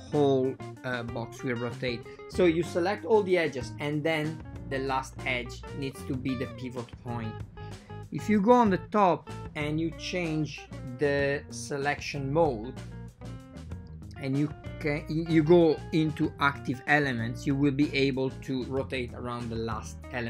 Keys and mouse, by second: 2.2 a, 2.2 a, 3.1 c, 6.0 shift+click, 6.5 r, 13.2 a, 13.7 a, 13.7 c, 15.6 shift+click, 16.4 r.